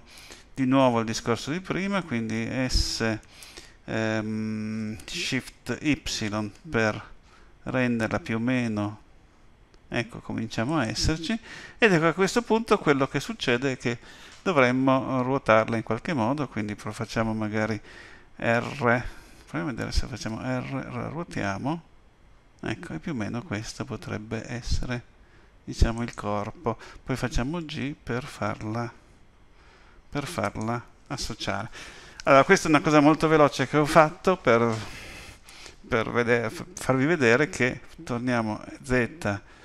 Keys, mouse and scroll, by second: 2.7 s, 20.3 r, 27.2 g, 38.6 z.